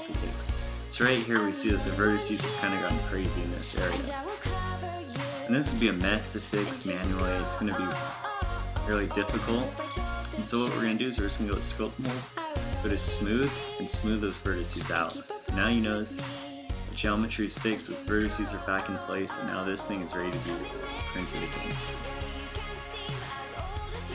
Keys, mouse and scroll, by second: 15.3 Tab, 22.1 a.